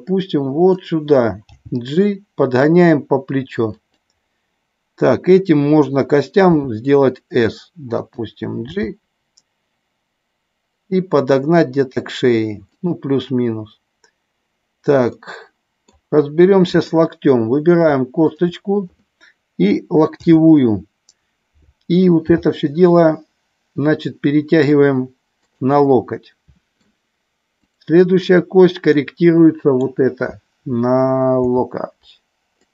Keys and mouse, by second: 1.5 g, 3.7 click, 6.6 s, 8.0 click, 8.6 g, 12.6 click, 15.1 middle click, 18.1 shift+click, 20.1 KP_7, 22.2 g, 25.3 click, 25.7-26.7 middle drag, 28.9 middle click, 31.5 g, 32.6 click.